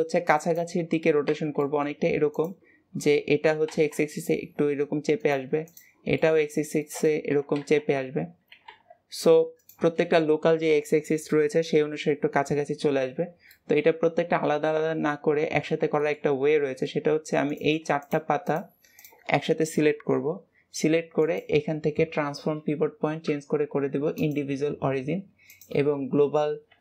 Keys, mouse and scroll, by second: 1.4-1.9 middle drag, 1.9-2.2 scroll up 2, 2.2 click, 5.5 click, 6.0-7.2 middle drag, 7.2 r, 13.0-13.4 scroll down 2, 13.4-16.2 middle drag, 16.2 scroll up 1, 16.4-17.4 middle drag, 17.4 click, 17.8 shift+click, 18.3 shift+click, 18.8 shift+click, 21.1-24.2 drag, 25.4-26.8 drag.